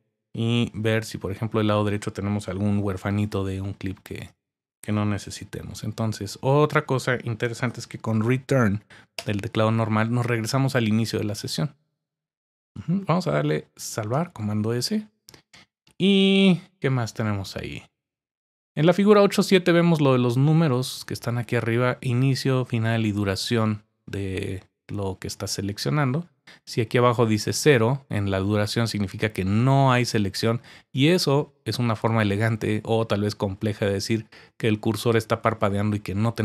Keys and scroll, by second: 0.9 Right, 5.2 BackSpace, 9.1 Return, 14.1 super+s.